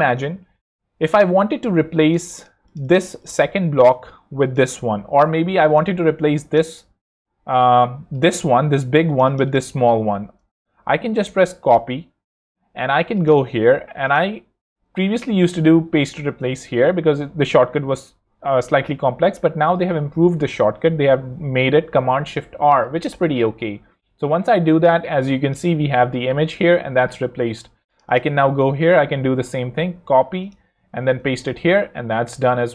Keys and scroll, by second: 6.5 super+c, 10.8 shift+super+c, 11.3 super+c, 20.8 Escape, 21.8 shift+super+Escape, 22.4 shift+super+r, 29.4 super+c, 30.9 shift+super+r.